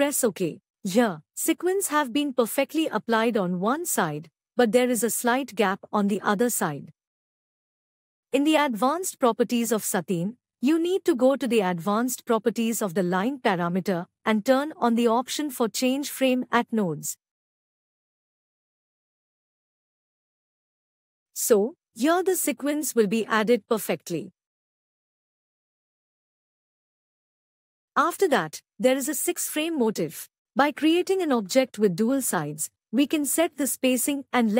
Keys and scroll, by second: 11.1 ctrl+Tab, 27.2 F11.